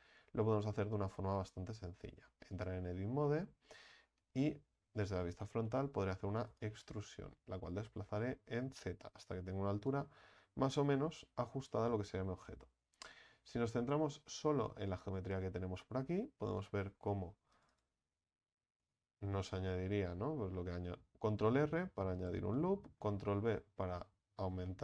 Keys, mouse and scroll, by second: 0.2 Tab, 2.5 click, 3.2-4.4 shift+middle drag, 4.4 KP_1, 5.6 shift+middle click, 6.3 e, 7.2-10.1 drag, 10.2-16.7 middle drag, 16.7 ctrl+r, 18.8 ctrl+b, 22.5-24.8 middle drag.